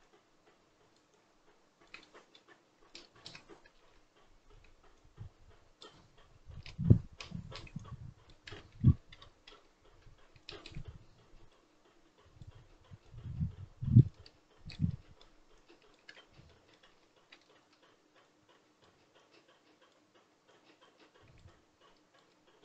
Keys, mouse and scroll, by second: 1.9 middle click, 2.8 ctrl+click, 3.7 ctrl+z, 4.9-8.5 drag, 8.5 ctrl+z, 8.7 ctrl+z, 9.0 ctrl+z, 9.4 ctrl+z, 10.3-14.8 shift+drag, 14.8 middle click, 15.5 shift+click, 16.0 ctrl+z, 16.4 middle click, 16.8 ctrl+z, 17.2 ctrl+z, 18.2-22.2 drag, 22.2 middle click.